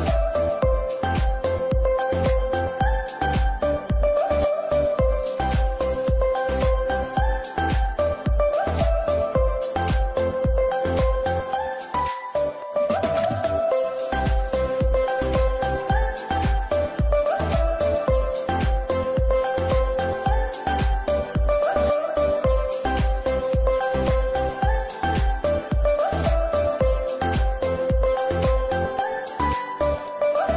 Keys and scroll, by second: 2.7 Escape, 3.3 ctrl+r, 4.0 F3, 16.1 ctrl+z, 18.7 3, 20.8 F2, 21.8 Escape, 28.0 g.